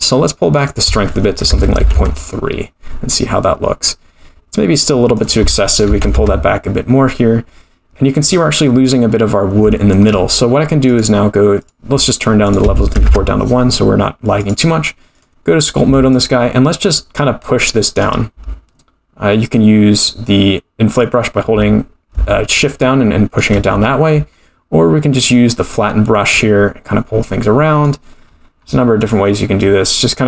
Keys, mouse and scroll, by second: 0.5-2.7 drag, 5.2-6.9 drag, 7.9-8.2 scroll down 2, 8.3 middle drag, 8.9-9.6 scroll down 2, 9.7-10.0 shift+middle drag, 10.9 click, 12.4 click, 14.4-15.8 drag, 16.3-18.1 shift+drag, 22.7 shift+click, 24.2 scroll down 2, 25.2 click, 25.9-28.1 drag, 28.3-29.0 scroll up 10, 29.0 click, 29.7-30.2 drag.